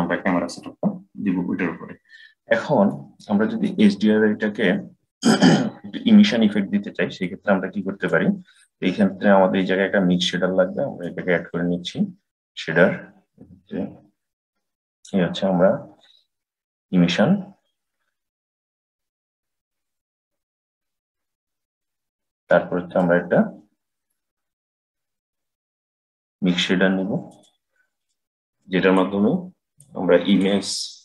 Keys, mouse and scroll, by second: 2.7-7.1 middle drag, 7.1 click, 10.9-13.9 drag, 18.7-20.1 drag, 22.7-25.9 drag, 28.4 click, 29.7 click, 30.9 click.